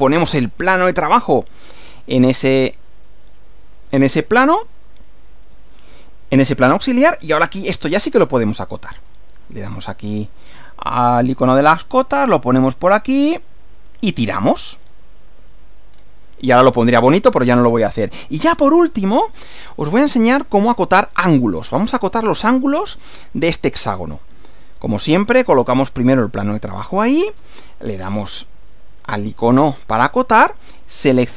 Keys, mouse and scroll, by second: 1.9 click, 2.4 space, 5.0-7.0 middle drag, 8.4-9.3 middle drag, 9.7 click, 11.6 click, 13.0 click, 14.8 click, 15.9 scroll down 1, 17.1 scroll down 1, 18.0-18.8 middle drag, 19.0 shift+middle click, 19.8 shift+scroll up 1, 19.9 shift+scroll down 1, 20.0 scroll up 2, 24.5 click, 26.0 click, 28.6 click.